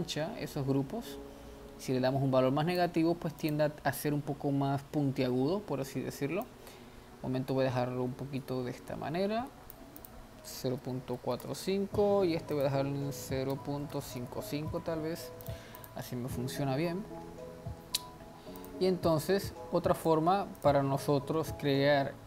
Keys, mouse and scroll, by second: 3.5 click, 6.5-9.7 drag, 10.0-14.1 drag, 14.1 5, 15.4 click, 15.8 click, 17.4 scroll down 1, 18.6-20.8 drag.